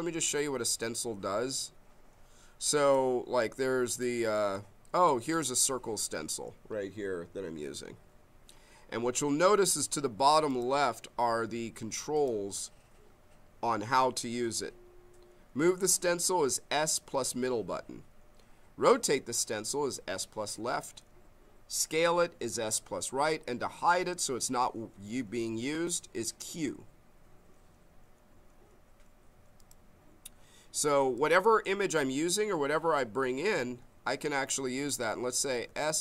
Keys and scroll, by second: 35.6 s.